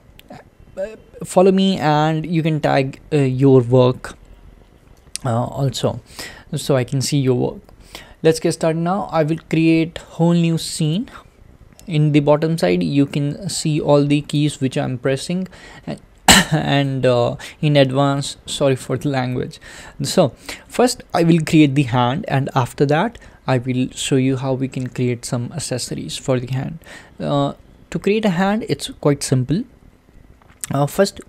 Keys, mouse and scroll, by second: 11.0-14.9 drag, 16.8 click, 17.8-19.0 shift+middle drag, 19.0-20.4 scroll down 1, 20.4-31.2 shift+middle drag.